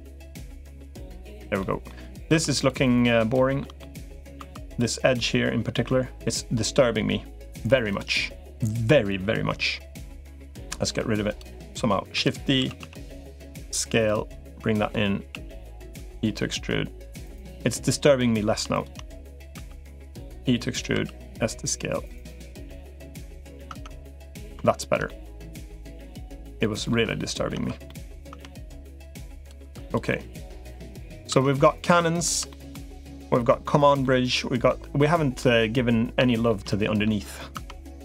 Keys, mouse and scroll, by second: 1.4 middle click, 2.2 Tab, 2.4 click, 3.2 shift+middle click, 3.6 middle click, 4.4 2, 4.9 middle click, 7.4 3, 12.0 shift+d, 12.4 s, 14.0 click, 15.2 s, 15.8 e, 19.4 e, 20.8 s, 22.4 middle click, 23.6 Tab, 23.9 middle click, 24.4-25.5 shift+middle drag, 26.4 middle click, 27.4 Tab, 27.7 middle click, 28.2 Tab, 29.4 Tab, 29.9 middle click, 31.2 Tab, 31.7 middle click, 32.3 shift+middle click, 32.9 middle click, 33.8 middle click, 34.5 middle click, 36.1 shift+middle click, 36.5 middle click, 37.4 Tab, 37.9 middle click.